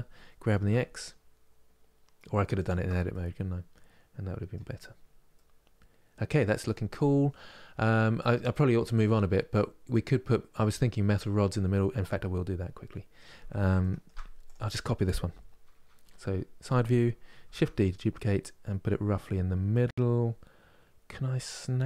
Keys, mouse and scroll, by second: 2.8-4.5 middle drag, 4.5-5.0 scroll down 2, 5.0-8.0 middle drag, 12.0-13.5 scroll up 2, 13.5 shift+middle click, 14.2-15.7 drag, 15.7 KP_3, 17.2 shift+d.